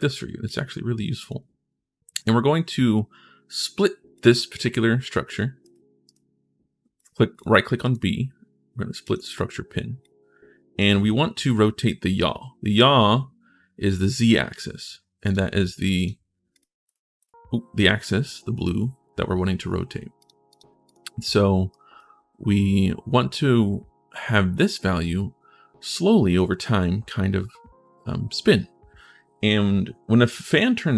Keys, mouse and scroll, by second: 0.2 click, 2.0 right click, 3.9 click, 5.4 right click, 5.8 right click, 6.7 right click, 7.1 right click, 7.6 right click, 8.8 click, 9.8 click, 15.0 click, 15.7 click, 16.3 click, 16.6 click, 17.0 click.